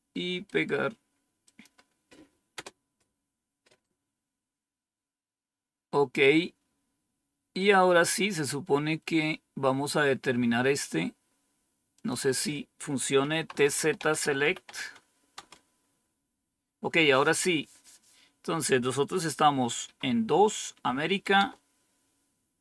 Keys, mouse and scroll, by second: 1.4 click, 2.5 Return, 6.2 scroll down 2, 6.8-11.9 scroll down 4, 11.9 click, 13.2-15.1 typing, 15.3 Return, 21.3 Return.